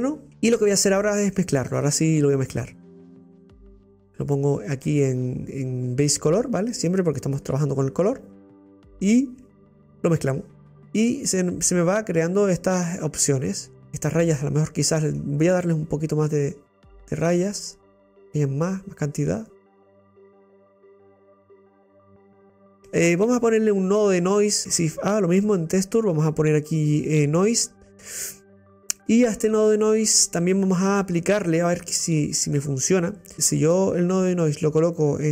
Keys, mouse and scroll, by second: 0.2-4.3 middle drag, 4.3 click, 6.5 scroll up 8, 6.7 click, 9.7 click, 11.0 scroll up 2, 11.4-16.4 middle drag, 16.4-19.3 drag, 20.6-22.7 drag, 22.7-24.2 middle drag, 24.2 click, 27.5 click, 29.7-35.3 middle drag.